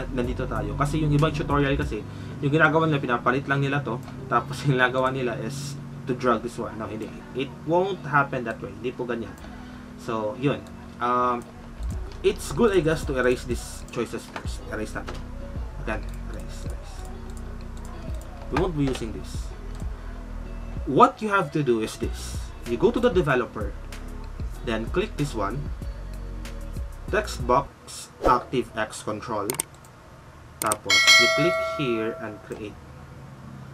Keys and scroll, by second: 14.9 ctrl+Delete, 18.7 ctrl+Delete.